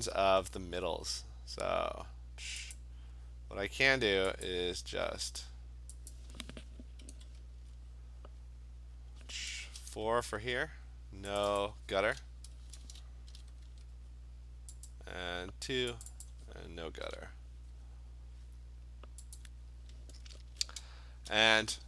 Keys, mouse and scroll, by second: 2.8 click, 4.5 click, 5.4 click, 6.2 click, 7.2 2, 9.7 BackSpace, 11.4 click, 11.6 click, 13.4 0, 13.7 Tab, 14.9 click, 16.1 click, 16.3 click, 17.1 0, 19.4 click.